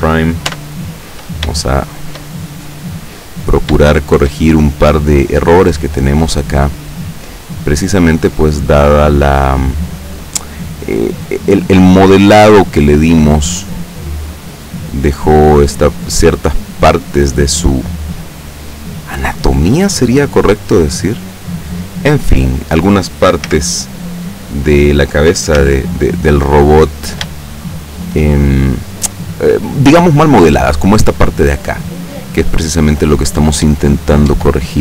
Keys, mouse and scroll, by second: 0.6 Tab, 1.7-2.3 shift+middle drag, 2.4-3.3 shift+middle drag, 3.3-3.9 scroll up 1, 3.9 shift+middle click, 4.5 shift+middle click, 5.8 right click, 6.8-7.7 middle drag, 8.2-9.6 drag, 9.6-10.7 middle drag, 11.2 right click, 12.6-13.2 middle drag, 13.6 click, 14.6-16.1 middle drag, 16.6-17.9 middle drag, 18.5 middle click, 19.6 right click, 20.3 right click, 20.7 right click, 21.3 right click, 21.7 right click, 22.1 right click, 23.6 z, 25.7 z, 26.3-26.7 scroll up 1, 27.5 shift+middle click, 29.5 middle click, 29.7 scroll up 2, 33.7 Tab.